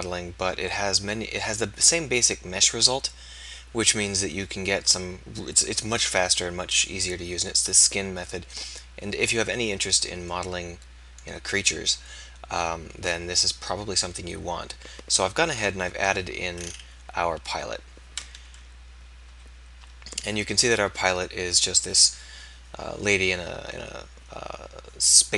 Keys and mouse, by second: 15.4 KP_1, 18.4 KP_3, 19.3 KP_1.